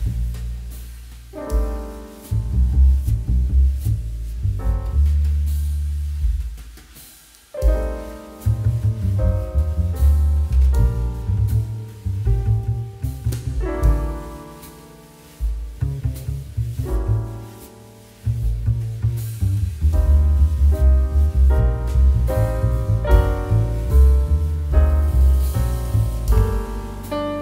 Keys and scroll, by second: 13.6 [, 17.5 [, 18.4 ], 19.9 [, 21.9 [, 23.0 [, 24.1 ], 24.8 [, 27.2 ].